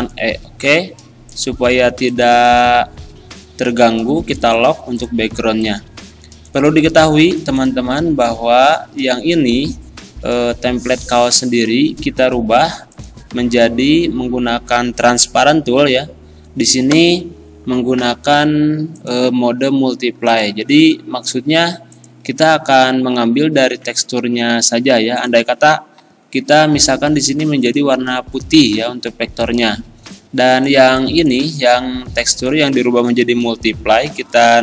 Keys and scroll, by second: 31.7 ctrl+z.